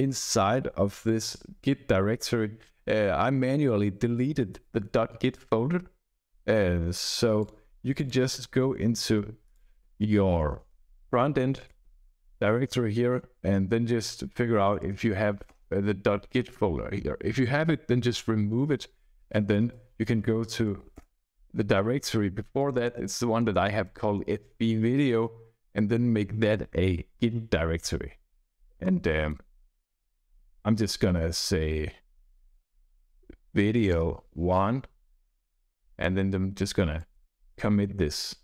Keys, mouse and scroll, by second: 31.3 click, 32.7-34.2 typing, 35.8 click, 36.9 click.